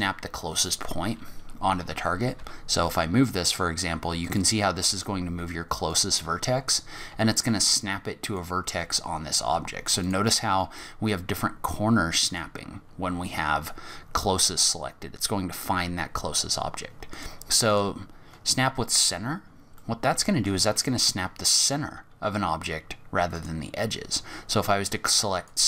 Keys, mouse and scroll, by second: 0.7 click, 2.3 g, 4.9 g, 7.1 g, 8.8 g, 10.6 g, 14.4 click, 17.1 click, 17.7 click, 18.3-19.6 scroll up 21, 19.8 middle click, 20.7 scroll down 5, 23.3 click.